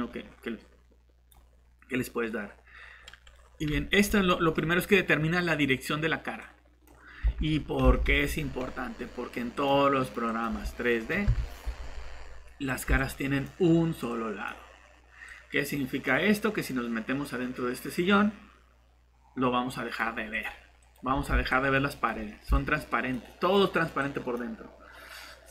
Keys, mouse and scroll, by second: 2.2 middle click, 6.4 click, 7.2 alt+shift+Tab, 7.8 alt+Tab, 10.0 right click, 10.2 click, 11.2 Delete, 14.5 typing, 16.1-16.8 typing, 16.3 click, 19.1 alt+Delete, 19.6 typing, 20.9-23.1 typing, 24.5-25.3 typing.